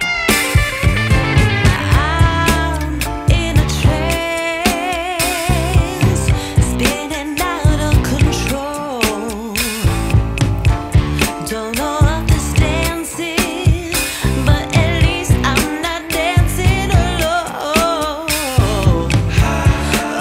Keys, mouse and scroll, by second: 0.6-5.3 drag, 5.3-8.4 right drag, 8.8-11.2 drag, 11.5-13.2 drag, 13.2-14.8 right drag, 14.8 ctrl+s, 15.2 space, 16.4-17.0 scroll up 3, 17.2-17.6 scroll down 3.